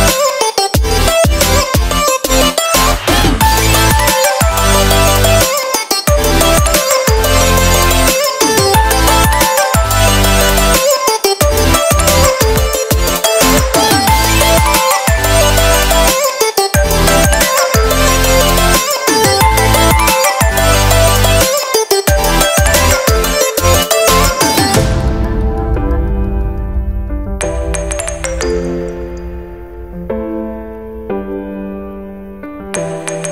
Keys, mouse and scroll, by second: 0.5 click, 1.4 click, 4.9 click, 7.1 scroll down 3, 7.4 middle click, 8.4 g, 10.0 shift+g, 12.0 click, 14.2 middle click, 14.9 shift+middle click, 15.3 ctrl+middle click, 15.7 shift+middle click, 16.0 middle click, 17.2 middle click, 18.0 shift+middle click, 18.2 middle click, 18.6 shift+middle click, 19.9 shift+middle click, 20.3 click, 21.9 shift+click, 23.4 ctrl+l, 25.3 middle click, 26.2-26.8 scroll up 4, 27.4 click, 27.6 middle click, 29.0 Tab, 30.7 shift+middle click, 31.0 a, 31.2 right click, 32.5 u.